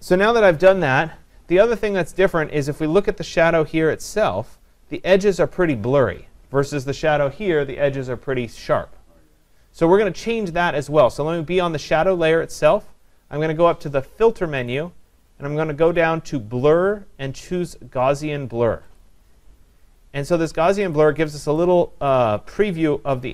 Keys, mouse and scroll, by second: 11.2-21.0 drag, 22.1 click.